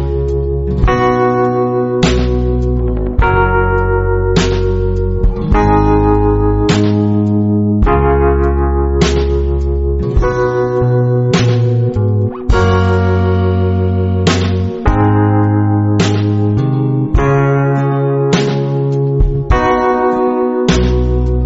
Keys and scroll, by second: 1.4 a, 3.8-7.4 typing, 6.5 alt+super+space, 7.6 super+space, 7.7 super+space, 7.8 super+space, 7.8 super+space, 8.4 alt+super+space, 8.9 alt+super+space, 11.8 super+g, 12.5 space, 13.0 space, 13.1 space, 14.6 typing, 17.3 shift+super+F5, 18.0-18.6 typing, 20.8 \.